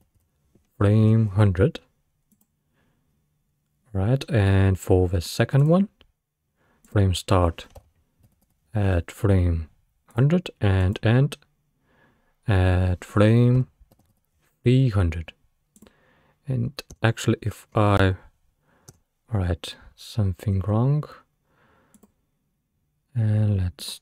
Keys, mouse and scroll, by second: 0.0 0, 5.6 click, 6.9-8.5 drag, 8.5 0, 10.8-13.9 drag, 14.1 0, 16.5-17.0 scroll down 2, 17.0 space, 17.8-18.9 scroll up 2, 18.9 scroll up 1, 18.9 space, 22.0 click, 23.8 click.